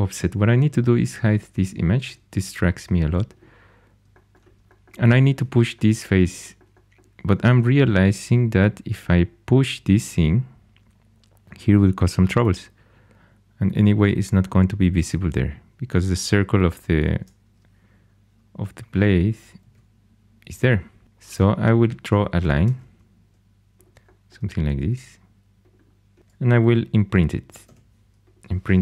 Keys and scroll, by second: 19.5 alt+h, 22.6 shift+a, 26.2 shift+h, 27.5 2.